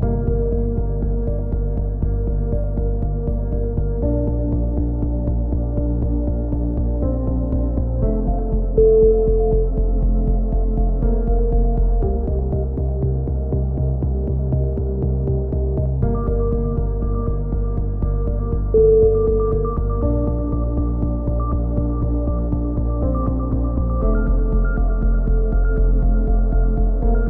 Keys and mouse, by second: 1.2 click, 2.1 middle click, 2.7 click, 2.7 right click, 4.6 a, 5.9 click, 6.7 middle click, 7.2 k, 11.6 click, 12.2 right click, 12.6 click, 12.7 x, 13.3 a, 13.5-14.5 middle drag, 16.4-18.4 drag, 17.2 right click, 17.6 right click, 21.3-22.4 middle drag, 22.4 a, 23.0 middle click, 23.5 click, 23.9 middle click, 24.0 k, 26.4 a, 26.8-27.2 middle drag.